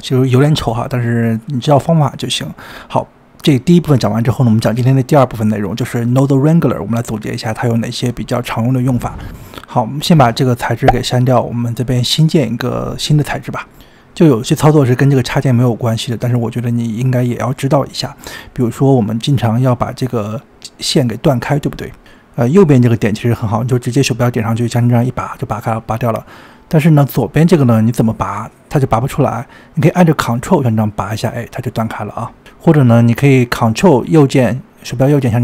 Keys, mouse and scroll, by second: 1.4-1.8 scroll down 2, 1.8-2.8 middle drag, 2.8-3.5 scroll up 4, 3.5-4.1 scroll down 4, 4.1-5.0 scroll up 17, 5.0-5.6 scroll down 2, 5.6-6.9 scroll down 23, 6.9-8.6 shift+middle drag, 8.6 scroll up 3, 10.5-11.0 drag, 12.7 click, 13.0 scroll down 4, 13.2-13.9 scroll up 19, 13.9-15.1 shift+middle drag, 20.0 click, 22.2 shift+a, 24.7 click, 26.4 drag, 28.0 click, 30.1 ctrl+click, 32.5 click.